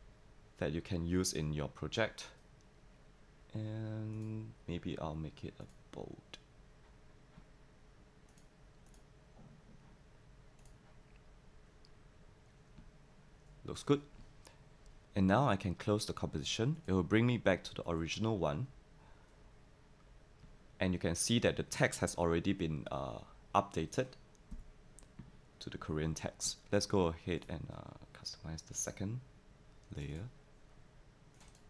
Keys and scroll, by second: 24.5 v.